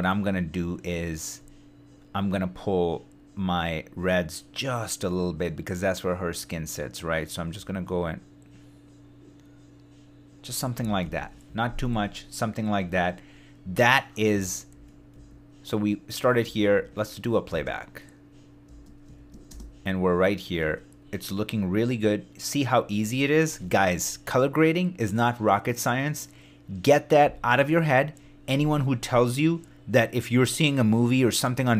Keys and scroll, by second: 10.7 super+d, 11.4 shift+super+d, 14.4 shift+d, 16.4 shift+d, 17.5 shift+space, 18.6 space.